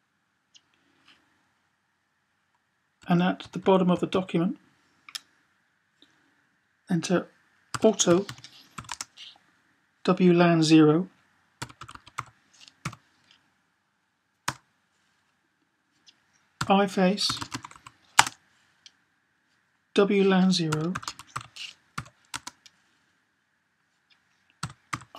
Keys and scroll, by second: 2.8 Down, 3.1 Down, 3.3 Down, 3.5 Down, 3.7 Down, 4.0 Down, 7.6-8.6 typing, 11.1-12.7 typing, 17.3-17.6 typing, 20.2-21.7 typing, 24.1-25.1 typing.